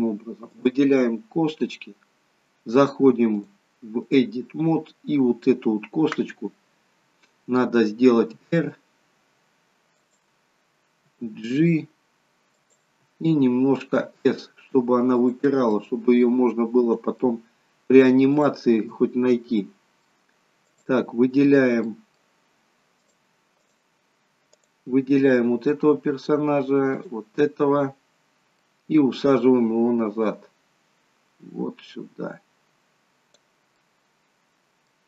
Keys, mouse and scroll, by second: 0.5 click, 3.4 click, 8.4 r, 11.0 g, 13.9 s, 15.8 middle click, 18.4 click, 19.6 middle click, 20.6 click, 21.8 middle click, 23.0 click, 24.4 click, 27.0 shift+click, 28.7 middle click, 29.2 scroll down 1, 30.2 click, 33.8 middle click.